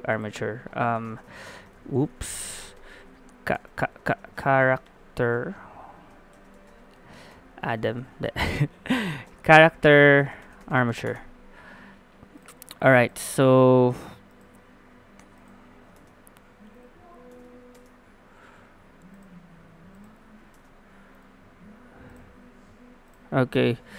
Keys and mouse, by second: 1.9 BackSpace, 2.0 BackSpace, 2.1 BackSpace, 7.8 BackSpace, 7.9 BackSpace, 12.4-16.8 drag, 16.0 Tab, 17.3 Tab, 20.5 ctrl+Tab.